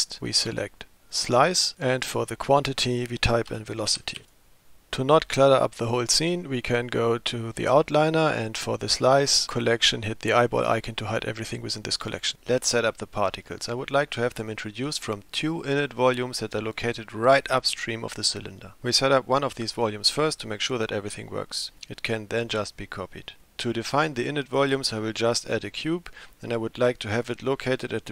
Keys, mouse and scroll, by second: 2.1-4.3 drag, 12.0 click.